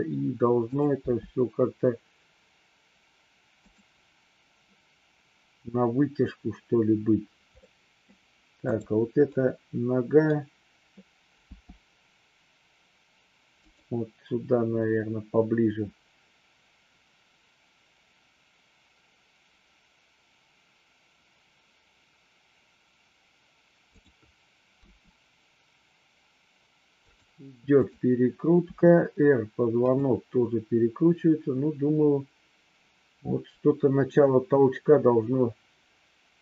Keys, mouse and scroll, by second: 0.7 click, 1.0 g, 3.5 click, 7.7-8.0 middle drag, 8.8 click, 9.3-10.2 middle drag, 11.4 g, 24.8 r, 27.0 drag, 27.7-28.2 drag, 28.7 r, 29.8 click.